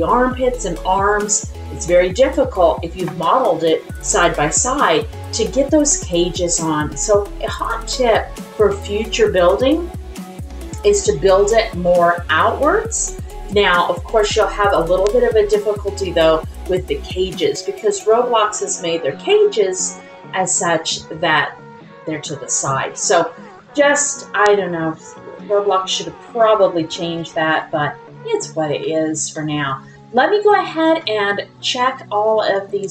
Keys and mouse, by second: 25.4 middle click, 26.6 middle click, 27.6 middle click, 28.8 shift+middle click, 29.3-30.3 middle drag, 31.0 middle click, 32.4 ctrl+click.